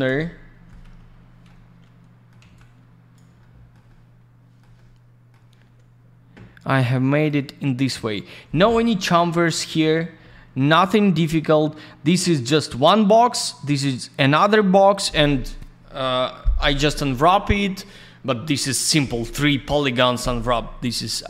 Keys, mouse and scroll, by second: 0.1 alt+middle click, 0.8 F3, 1.3 F2, 1.4 middle click, 2.4 alt+z, 2.5 click, 3.4 alt+middle click, 3.8 middle click, 4.7 middle click, 6.9 click, 8.6 F4, 9.5 middle click, 9.7 middle click, 11.6 scroll up 1, 11.7-12.6 scroll down 1.